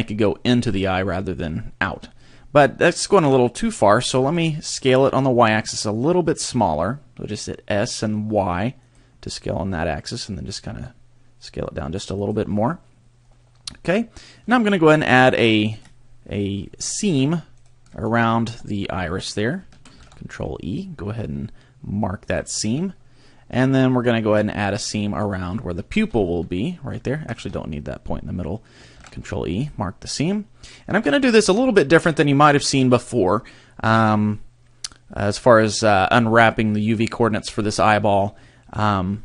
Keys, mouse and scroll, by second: 4.3 s, 8.9 click, 10.7 s, 12.3 click, 13.4 middle click, 15.7 alt+right click, 16.8 alt+right click, 17.6 alt+right click, 18.5 middle click, 20.0 ctrl+e, 22.8 middle click, 23.7-24.7 scroll up 1, 24.7 scroll up 1, 24.8 alt+right click, 26.0 shift+right click, 26.2 middle click, 27.3 shift+right click, 29.0 ctrl+e, 30.2-30.6 scroll down 2, 31.0 a, 31.4 scroll down 2, 31.8 shift+middle click, 32.3 middle click.